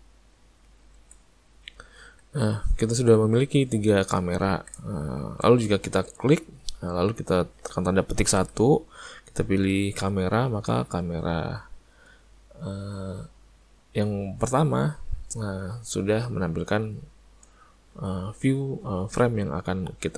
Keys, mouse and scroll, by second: 0.9 ctrl+middle click, 1.0 alt+a, 1.4 middle click, 2.0 middle click, 2.3 middle click, 3.6 middle click, 4.4 ctrl+middle click, 4.9 shift+middle click, 6.1 ctrl+middle click, 6.3 click.